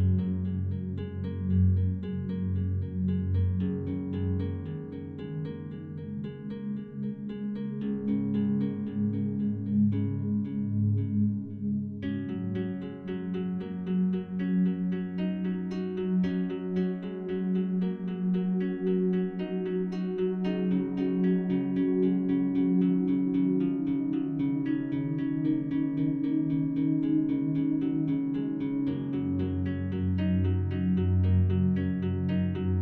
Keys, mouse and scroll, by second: 1.2-9.9 drag, 9.9 Tab, 12.1 Tab, 12.4 alt+shift+right click, 13.6 3, 15.0 alt+shift+right click, 19.7 click, 22.0 shift+o, 23.5-24.3 typing, 24.4 Return, 25.9-31.6 drag.